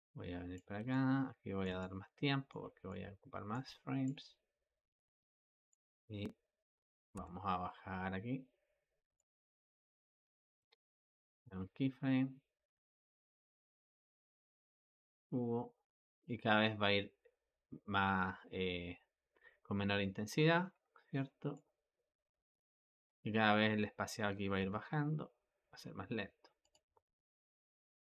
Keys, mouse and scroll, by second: 0.8-3.9 ctrl+middle drag, 3.9-7.0 drag, 7.0 g, 10.4 i, 11.3-14.9 drag, 14.9 g, 20.6 i, 21.4-24.4 drag, 24.4 g, 27.7 i.